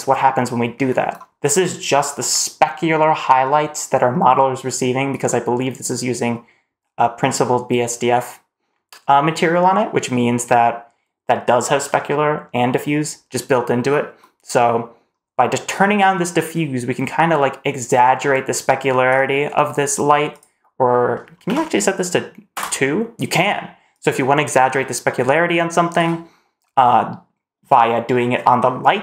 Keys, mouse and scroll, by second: 0.2-1.2 scroll up 1, 15.6-18.9 drag, 20.1-22.4 drag, 23.8-25.9 drag, 26.5-27.9 scroll down 1.